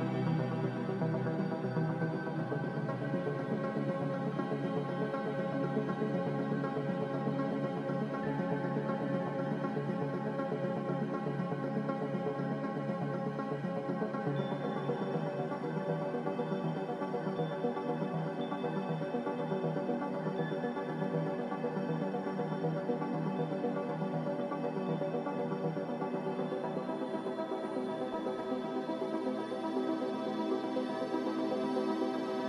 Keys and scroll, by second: 4.6 z, 12.4 g, 14.6 z, 20.0 a, 20.8 z, 25.6 typing.